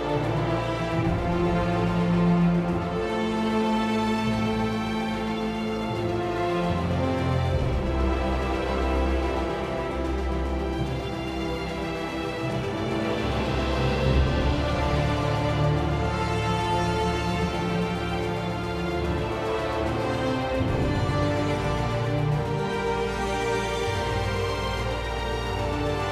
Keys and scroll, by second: 3.9-5.5 typing, 8.4 r, 9.7 r, 17.7 1, 17.9 Return, 19.6 ctrl+z, 23.4 r.